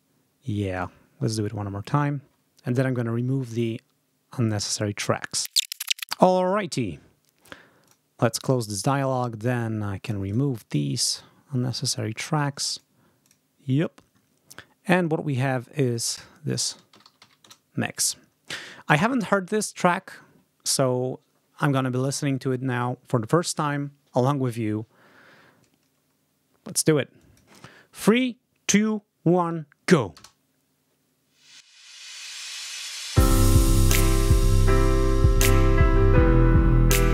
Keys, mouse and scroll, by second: 0.6 click, 7.8 click, 9.4 ctrl+click, 9.9 ctrl+click, 11.0 click, 12.3 click, 13.1 click, 14.8 click, 15.8 click, 16.6-17.6 typing, 25.6 ctrl+scroll down 2, 26.2 ctrl+scroll down 2, 27.1 ctrl+click, 30.1 space.